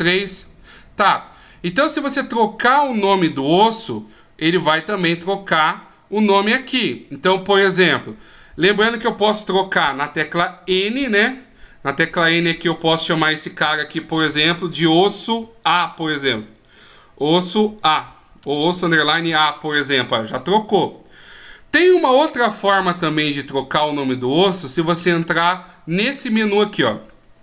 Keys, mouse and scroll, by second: 6.8 right click, 10.0 n, 10.9-12.5 scroll up 6, 12.5 click, 12.5-13.2 scroll up 3, 14.3 s, 26.5 click.